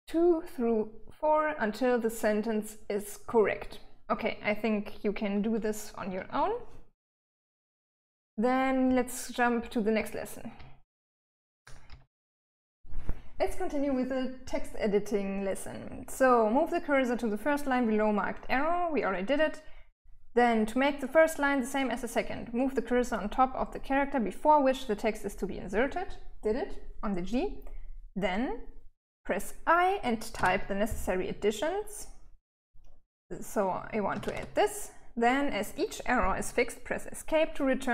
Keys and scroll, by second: 8.6-11.8 typing, 29.8 i, 33.3-34.2 typing, 37.8 Escape.